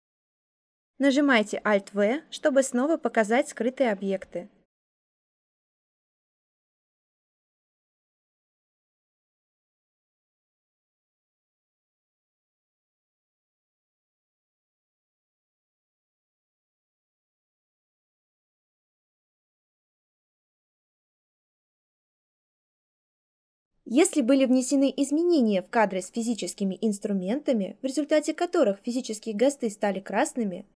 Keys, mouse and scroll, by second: 0.9 alt+v.